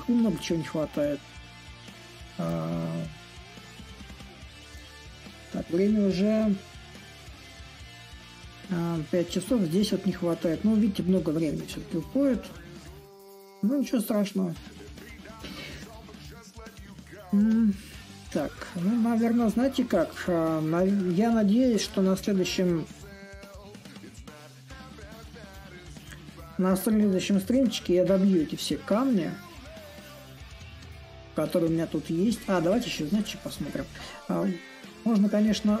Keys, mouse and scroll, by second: 0.0-5.0 drag, 5.3-10.3 drag, 10.7-15.7 drag, 18.1-24.1 drag, 25.1-35.8 drag.